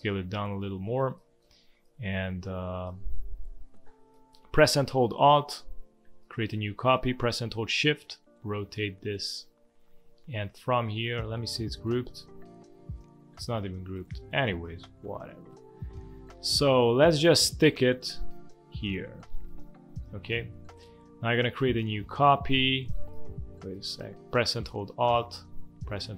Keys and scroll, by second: 1.4 space, 3.4 space, 20.3 space.